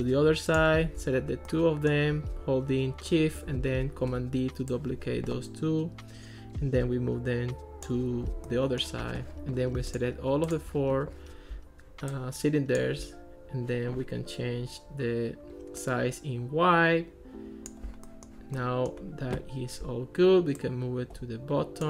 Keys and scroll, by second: 4.1 super+d.